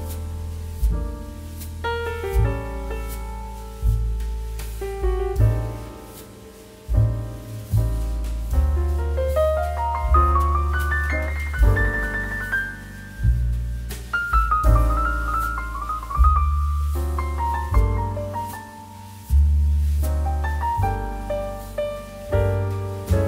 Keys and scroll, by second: 1.9 ctrl+t, 12.2 Return.